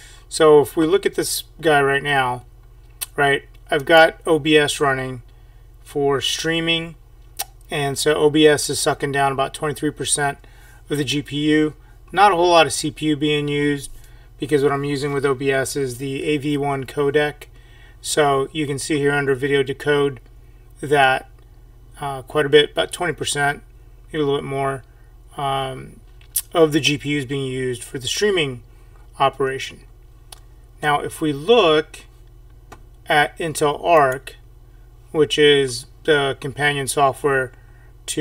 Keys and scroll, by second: 34.0 F5, 34.0 alt+Tab.